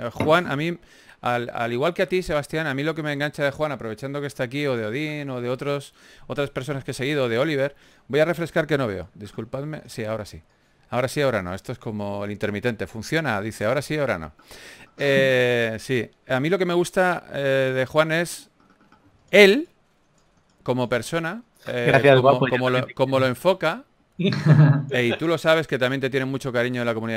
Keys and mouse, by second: 9.6 Tab, 9.6 KP_3, 9.6 g, 9.8 f, 10.7-12.0 drag, 10.7 f, 15.3-16.3 drag, 16.5 f, 17.1 click, 18.0 ctrl+z, 18.4 f, 20.0 f, 25.2 f, 25.5-27.1 drag.